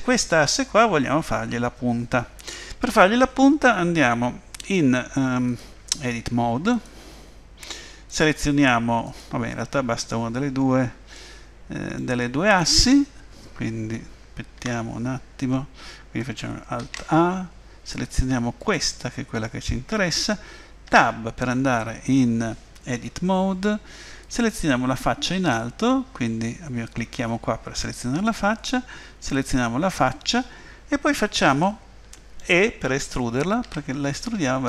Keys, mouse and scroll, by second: 5.5 click, 8.1 click, 11.1 middle click, 14.6 Tab, 16.8 alt+a, 18.6 click, 20.9 Tab, 24.2 click, 29.3 click, 31.6 middle click, 33.7 e.